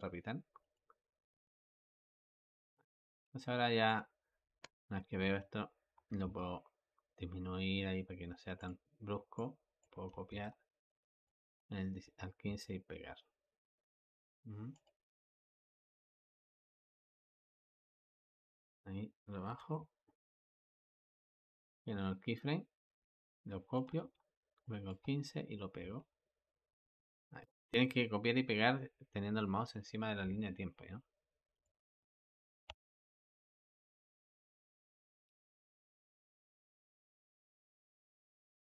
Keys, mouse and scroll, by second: 0.5 click, 2.2 click, 3.1 Escape, 3.7 click, 5.8 g, 9.2 click, 10.1 ctrl+c, 11.1-12.3 drag, 12.3 ctrl+v, 14.6-16.8 drag, 16.8 ctrl+z, 17.2 ctrl+z, 18.1-19.3 drag, 19.3 g, 21.6 i, 23.2 click, 23.8 ctrl+c, 24.5-25.7 drag, 25.7 ctrl+v, 31.5-32.5 drag, 32.5 space, 34.9 Escape, 35.6-38.7 drag.